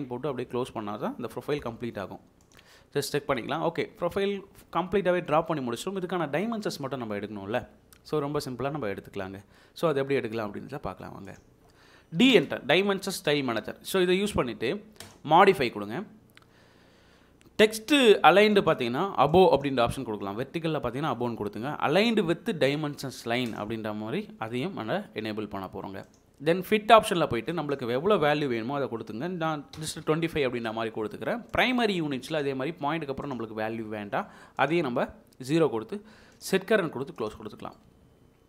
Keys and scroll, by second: 9.6 Escape, 12.3 d, 12.5 space, 29.7 typing.